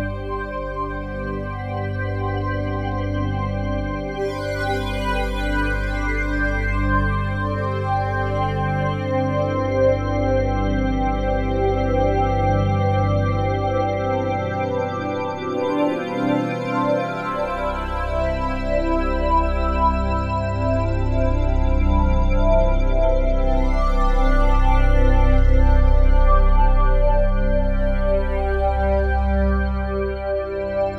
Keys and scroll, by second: 2.9 F3, 3.6 F3.